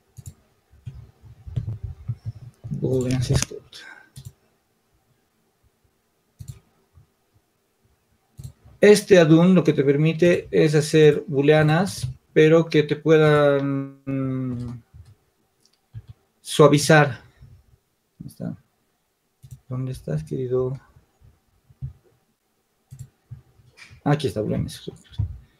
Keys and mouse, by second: 11.9-13.0 drag, 15.6 n, 23.0-25.5 drag.